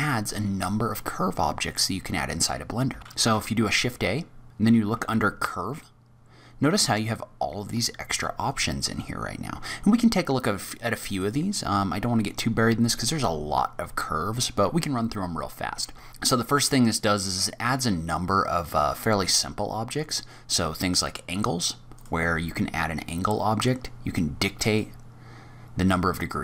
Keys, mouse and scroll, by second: 3.0 click, 3.0 middle click, 3.0 n, 3.2 shift+a, 4.9 shift+a, 11.1 click, 12.1-12.6 scroll down 5, 12.6-14.1 scroll up 2, 14.1-15.2 scroll up 2, 16.1 shift+a, 22.6-23.6 scroll down 3, 23.6 scroll down 3, 24.6 click.